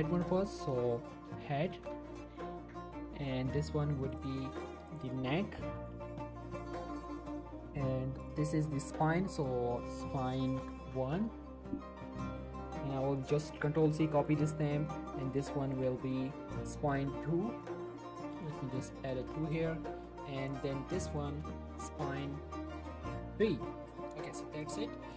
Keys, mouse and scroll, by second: 1.1-1.8 typing, 2.2 Return, 4.1 click, 5.8-6.2 typing, 6.6 Return, 8.2 click, 9.8-10.8 typing, 11.1 Return, 13.4 click, 13.7 ctrl+c, 14.3 click, 15.7 click, 16.0 ctrl+v, 17.9 click, 20.4 click, 21.4 ctrl+v, 24.4 scroll down 1, 24.8 shift+middle click.